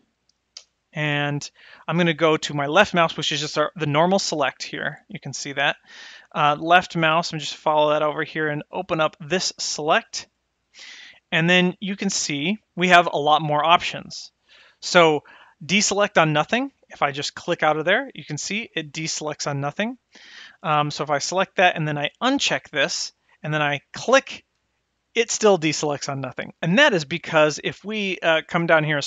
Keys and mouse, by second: 3.6 click, 3.9 click, 4.5 click, 8.9 click, 17.2 click, 21.0 click, 22.5 click, 24.0 click.